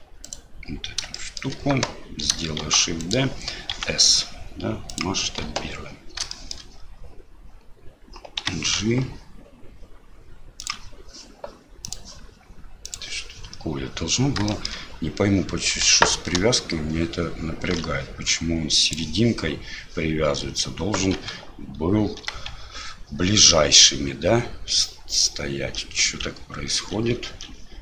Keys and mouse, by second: 0.2 right click, 1.1 shift+click, 2.6 shift+d, 3.7 s, 5.4 KP_7, 6.4 shift+middle click, 8.4 g, 12.0-13.1 drag, 14.6 shift+middle click, 22.2 g.